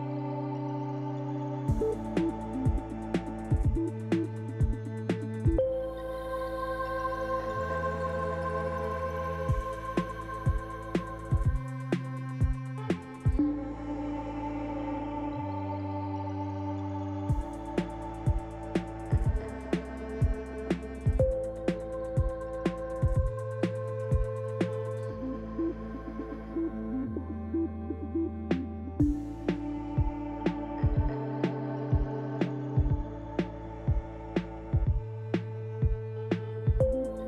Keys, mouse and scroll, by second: 8.3 click, 9.4 KP_Decimal, 10.7-11.3 scroll up 1, 11.3 Tab, 11.9 click, 12.9 l, 14.7 click, 15.4 click, 16.0 click, 16.9 l, 19.6 click, 20.3 click, 21.1 Tab, 24.1 click, 25.0 click, 25.4 Tab, 26.8 g, 29.3-29.8 scroll down 4, 30.3 middle click, 30.3-30.9 scroll down 2, 31.1 scroll down 1, 31.6 shift+middle click, 32.7 middle click, 34.9 shift+middle click, 35.8 scroll up 1, 36.9 shift+middle click.